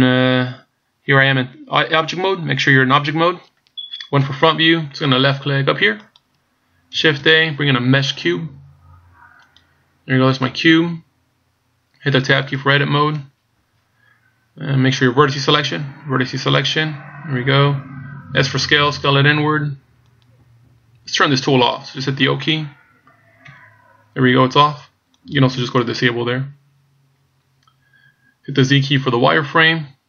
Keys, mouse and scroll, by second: 4.2 KP_1, 6.1 click, 7.1 shift+a, 10.6 scroll down 1, 13.1 Tab, 16.4 click, 18.6 s, 23.5 o, 25.1 click, 29.3 z.